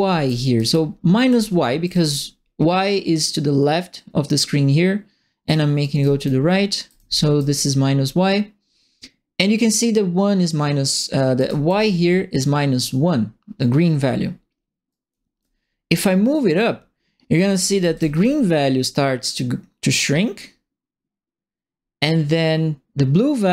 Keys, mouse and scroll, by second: 0.0-1.8 typing, 3.1-5.5 drag, 5.7-6.9 typing, 5.8-7.3 right drag, 11.3 right click, 11.4 w, 14.9 right click, 15.0 s, 16.6 click, 17.5 right click, 17.5 w, 17.9 a, 19.3-23.5 drag.